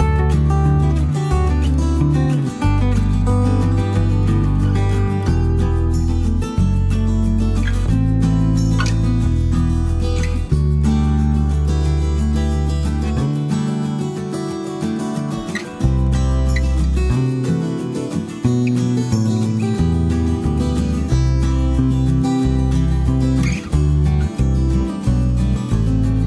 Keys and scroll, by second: 19.9 b, 20.2 s, 22.0 End, 24.0 Page_Down, 24.4 Page_Up, 25.5 End.